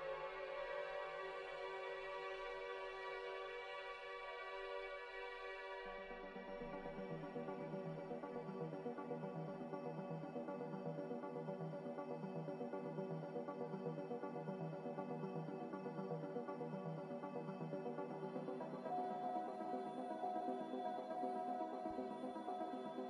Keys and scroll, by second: 5.5 9, 5.6 0, 6.3 Return.